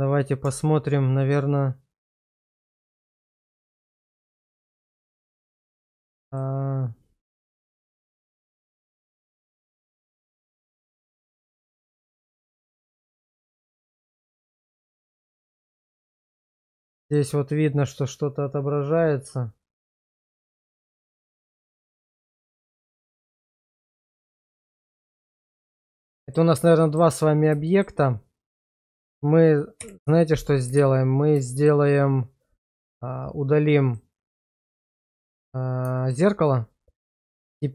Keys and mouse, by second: 0.5 Tab, 3.1 shift+z, 3.5 shift+middle click, 5.4 alt+q, 5.9 click, 7.4 1, 9.3 click, 10.1 1, 10.7 right click, 11.3 click, 12.1 1, 13.3 click, 14.0 1, 14.7 right click, 15.5 middle click, 16.7 middle click, 19.9 click, 20.7 click, 21.2 click, 22.1 click, 22.8 click, 23.8 click, 25.5 middle click, 26.2 shift+middle click, 26.9 middle click, 27.7 shift+middle click, 28.7 Tab, 29.8 /, 30.8 shift+z, 31.5 shift+middle click, 35.0 shift+middle click, 36.0 shift+middle click.